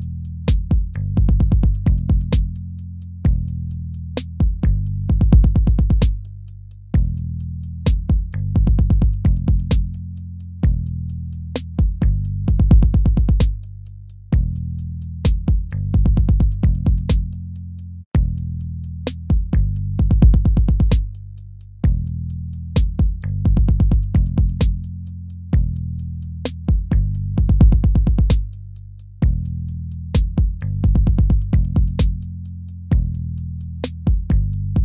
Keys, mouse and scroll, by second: 6.0 ctrl+-, 19.1 ctrl+-, 19.8 ctrl++, 24.1 ctrl+-, 24.3 ctrl++, 25.4 ctrl+-, 25.7 ctrl++, 28.0 ctrl+-, 29.7 ctrl++, 30.6 ctrl++, 30.8 ctrl++.